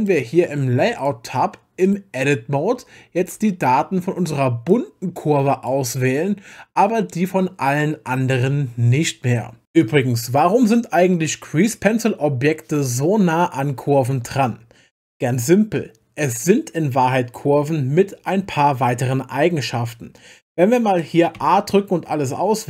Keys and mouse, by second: 0.0 click, 1.0 click, 1.8 click, 2.3 Tab, 3.2 a, 4.7 click.